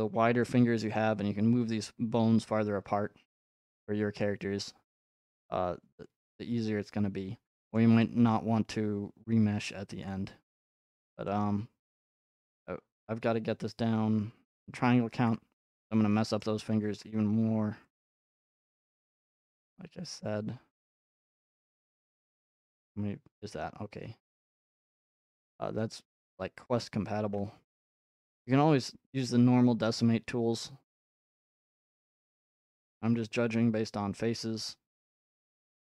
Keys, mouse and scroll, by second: 0.9 shift+middle click, 5.8 middle click, 6.1 middle click, 7.8 middle click, 8.3-9.6 shift+middle drag, 9.6 ctrl+Tab, 11.2 middle click, 13.0 ctrl+click, 13.0 ctrl+Tab, 15.2 ctrl+Tab, 15.8-16.9 middle drag, 16.9 r, 17.9 click, 18.7 ctrl+r, 18.7-20.0 drag, 20.2 scroll up 1, 21.9 ctrl+middle click, 22.1 ctrl+Tab, 24.1 ctrl+z, 24.4 ctrl+z, 27.2 r, 31.1-33.2 ctrl+drag.